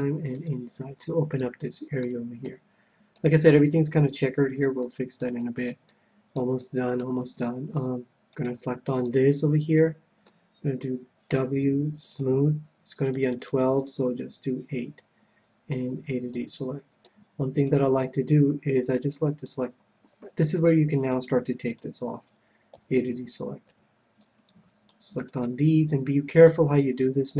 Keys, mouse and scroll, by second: 0.5-2.1 drag, 0.9-3.2 middle drag, 2.4 a, 3.4-8.2 middle drag, 4.3 KP_1, 8.4-10.1 right drag, 9.0-10.8 middle drag, 11.3 w, 13.1-15.5 drag, 15.9 a, 16.4-18.0 middle drag, 17.6-19.7 right drag, 18.4 c, 21.0-22.8 right drag, 21.7-23.5 drag, 22.8 a, 23.7 c, 25.2-27.3 right drag, 26.4 KP_1, 27.1 ctrl+KP_1.